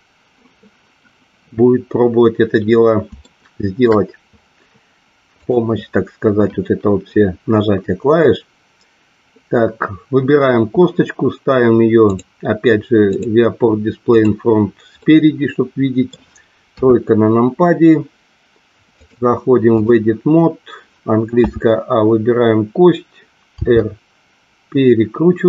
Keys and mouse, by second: 3.2 shift+middle click, 5.3 click, 12.1 click, 13.1 click, 14.9-16.1 middle drag, 16.7 KP_3, 18.9 click, 21.3 a, 23.6 r.